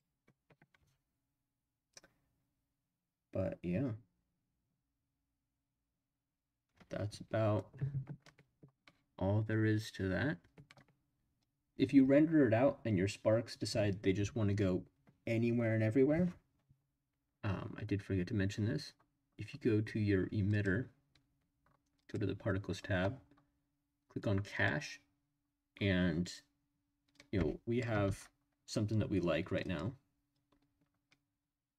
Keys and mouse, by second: 22.0 click, 24.5 click, 27.4-27.8 drag, 28.0 space, 29.6 click.